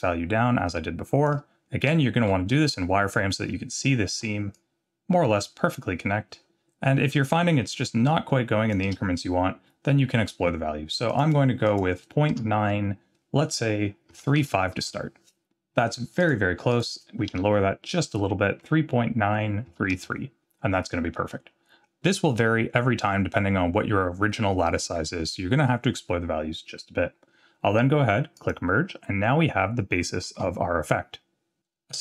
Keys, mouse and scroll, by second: 1.9 z, 2.7-3.8 scroll up 6, 4.5-8.7 shift+drag, 11.1-20.6 drag, 21.4-21.8 scroll down 1, 23.0-23.4 scroll down 1, 28.4 click, 29.0-29.7 scroll down 2, 30.2 z.